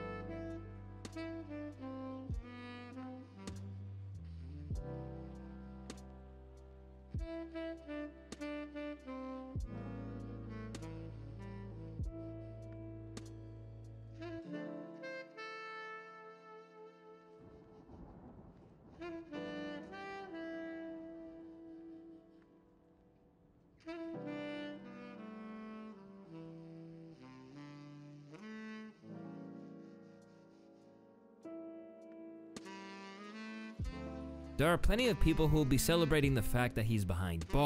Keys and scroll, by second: 3.4 ctrl+Home, 9.7 ctrl+c, 12.1 ctrl+v, 14.2 s, 29.1 s, 29.9 s, 34.2 space, 35.1 space.